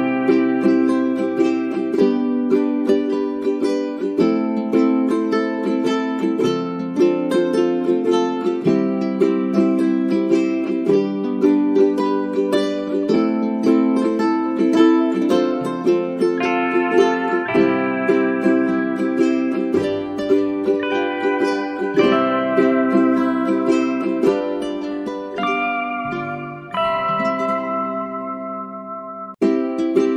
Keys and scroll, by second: 16.6 space, 24.3 space.